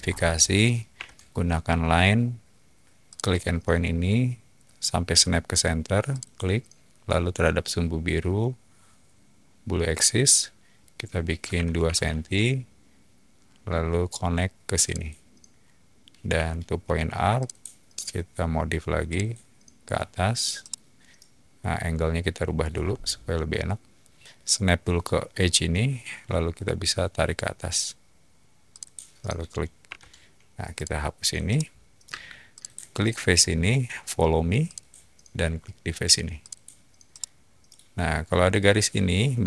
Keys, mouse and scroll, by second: 0.9 l, 3.1 click, 6.1 click, 11.5 2, 11.8 Return, 14.8 click, 16.3-20.8 typing, 17.3 click, 19.1 click, 20.6-22.5 middle drag, 22.7 middle click, 22.8-24.8 scroll up 1, 24.8-25.1 scroll up 1, 28.7 click, 29.7 typing, 30.7 click, 31.4 middle click, 32.0 space, 32.5 click, 34.6 click, 36.4 click, 37.1-37.6 middle drag.